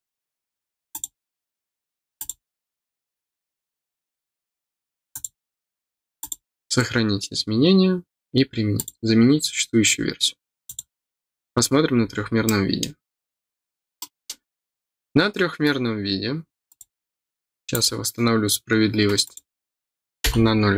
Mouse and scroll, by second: 0.9 click, 2.1 click, 5.1 click, 6.1 click, 8.7 click, 10.6 click, 11.4 scroll down 2, 12.1 scroll down 2, 12.4 middle click, 13.9 middle click, 16.6 click, 17.7 click, 19.2 click.